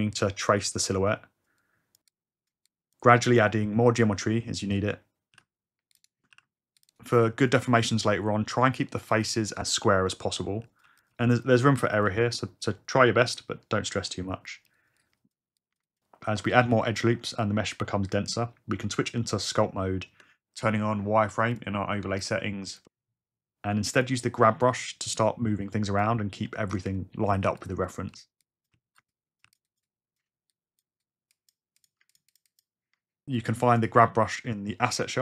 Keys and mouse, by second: 0.2 click, 2.1 click, 3.9 click, 4.2 click, 5.3 ctrl+r, 5.9 click, 6.3 ctrl+r, 6.8 click, 7.5 click, 7.9 click, 8.8-11.0 typing, 9.1 click, 9.3 click, 9.5 ctrl+r, 9.6 click, 9.8 click, 10.0 click, 10.3 ctrl+r, 10.6 ctrl+r, 10.6 click, 10.8 click, 11.1 click, 11.4 click, 11.6 click, 11.7 click, 12.0 click, 12.3 click, 14.5 click, 15.2 click, 15.8 click, 16.3 click, 17.4 click, 17.5 click, 19.2 Tab, 21.2 f, 21.6 click, 22.8-26.2 drag, 27.5 f, 27.6 click, 27.8 click, 28.1 g, 28.9 shift+f, 29.0 shift+click, 29.4 f, 31.0 click, 31.2 f, 31.4 click, 31.8 click, 32.2 shift+click.